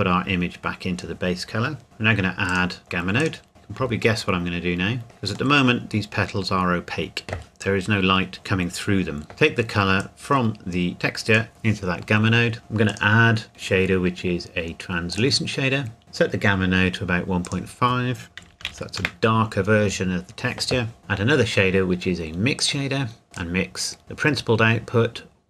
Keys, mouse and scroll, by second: 2.5 click, 4.4 shift+middle click, 9.3 click, 12.6 click, 15.1 click, 18.4 KP_1, 18.5 KP_Decimal, 18.7 KP_5, 19.0 KP_Enter, 21.0 click, 22.6 click.